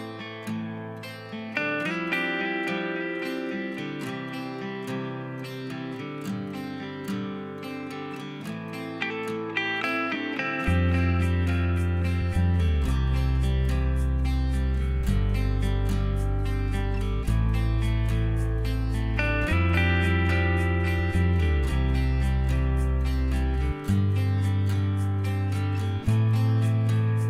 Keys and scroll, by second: 1.0-1.4 typing, 3.0-3.9 Delete, 7.6 ctrl+h, 11.0-14.1 typing, 23.6-24.5 typing.